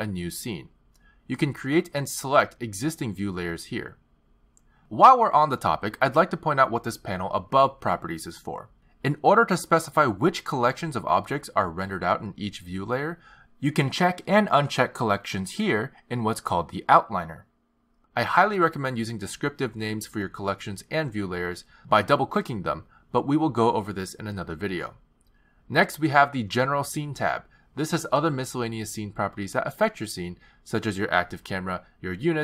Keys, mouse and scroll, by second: 1.4 click, 3.3 click, 4.5 click, 12.0 click, 14.0 click, 14.8 click, 15.8 click, 17.5 click, 18.6 click, 19.9 click, 20.1 click, 26.6 click, 28.4 click, 32.2 click.